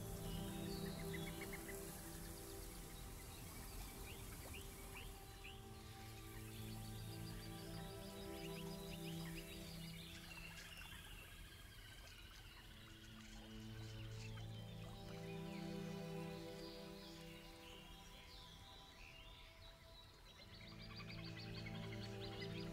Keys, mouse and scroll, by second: 2.2 click, 2.4 click, 3.5-4.7 drag, 5.3-7.0 drag, 7.6 click, 9.2 click, 10.4-11.7 drag, 12.8 click, 14.0-16.1 drag, 16.5 click, 17.7-18.7 drag, 19.4 alt+middle click, 19.7-21.1 alt+drag, 21.4 alt+middle click, 22.6 click.